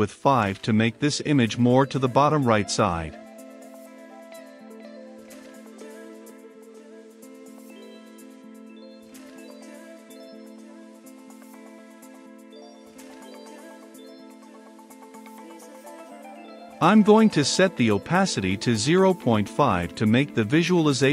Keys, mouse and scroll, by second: 19.5 Left, 20.8 typing.